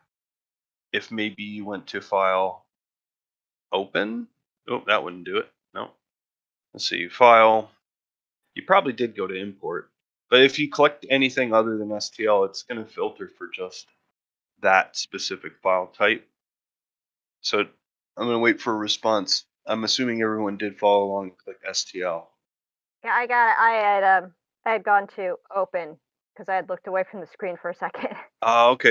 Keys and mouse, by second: 3.7-5.4 drag.